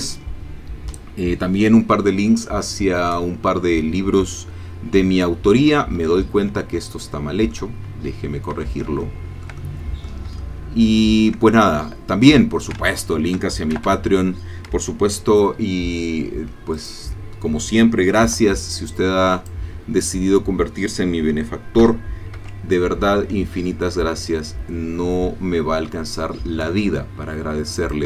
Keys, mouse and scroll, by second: 6.0 Escape, 6.9 shift+middle click, 8.1-8.4 scroll up 1, 8.6 Tab, 9.0-10.2 shift+middle drag, 9.2 shift+click, 10.4-11.5 shift+middle drag, 11.7-12.7 ctrl+shift+middle drag, 12.9 ctrl+shift+click, 13.7 shift+a, 16.8 click, 18.2 b, 18.9 click, 21.8 g, 22.4 z, 27.8 shift+click.